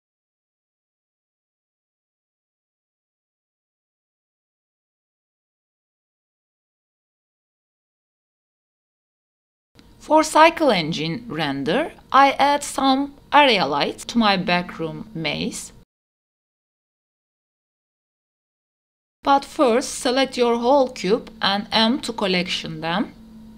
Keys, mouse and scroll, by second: 3.8 click, 3.9 Tab, 4.2 click, 5.0 g, 7.0 Tab, 7.9 a, 8.1 a, 9.2 g, 10.9 g, 15.0 g, 15.9 g, 17.1 s, 17.4 click, 18.1 KP_7, 19.3 click, 19.3 scroll down 2, 19.6 shift+click, 20.6 m, 23.2 Return.